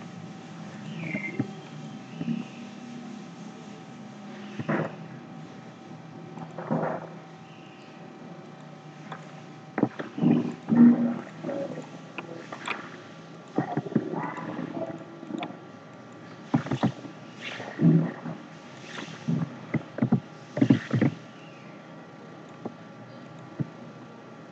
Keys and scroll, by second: 16.7 ctrl+z, 20.0 ctrl+z, 20.6 ctrl+c, 20.9 ctrl+f.